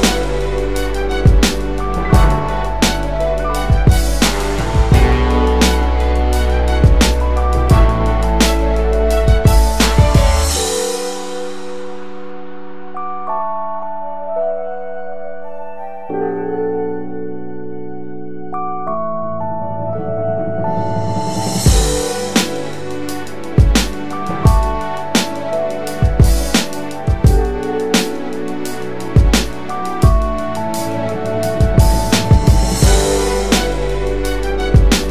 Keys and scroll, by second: 4.6 Delete, 6.6 space, 7.2 space, 10.5 1, 11.1 Tab, 11.6 1, 28.4 Delete.